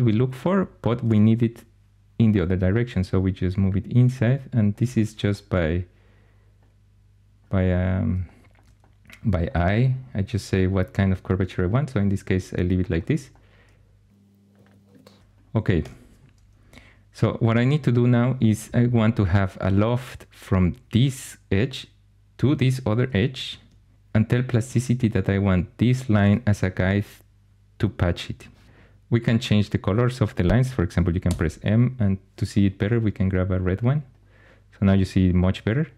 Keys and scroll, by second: 15.7 2, 31.1 m.